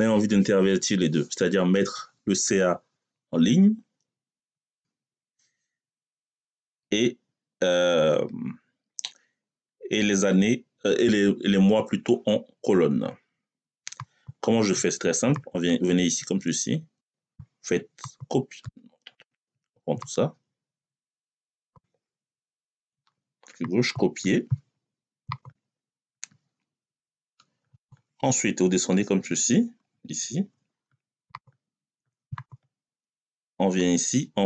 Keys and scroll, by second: 28.5 Down.